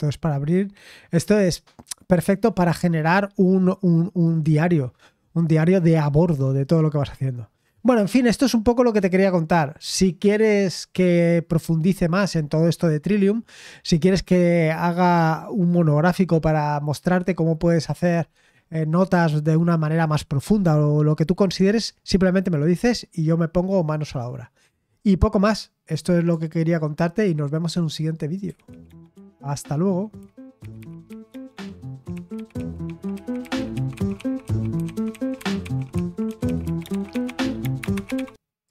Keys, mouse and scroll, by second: 28.4 super+x, 38.6 click.